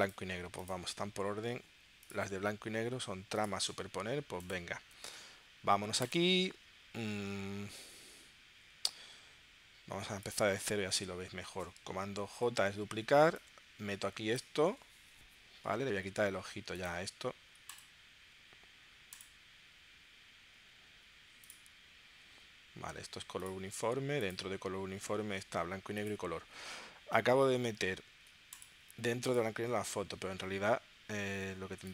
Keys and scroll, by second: 12.3 super+j.